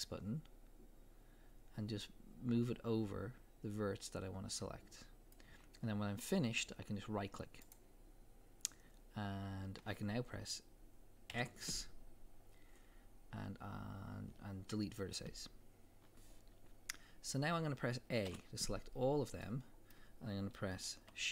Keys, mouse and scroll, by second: 1.4-7.7 middle drag, 7.7 right click, 11.3 x, 18.3 a, 19.0-19.4 scroll down 2, 19.4-21.3 middle drag.